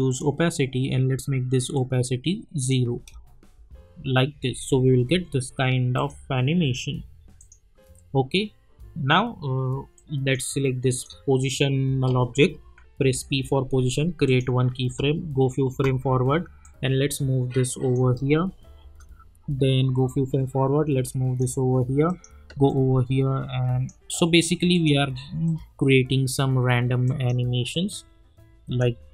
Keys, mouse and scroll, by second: 2.9 space, 5.9 click, 6.7 scroll up 1, 7.4 click, 7.8 scroll up 1, 9.9 click, 13.1 p, 14.2 click, 14.8 space, 16.6-18.0 drag, 18.0 space, 20.1-29.1 drag.